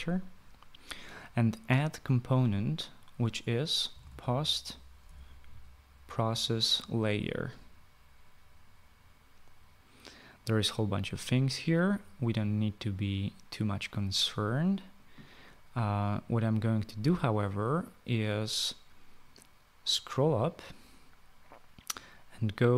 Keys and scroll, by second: 3.8-5.2 typing.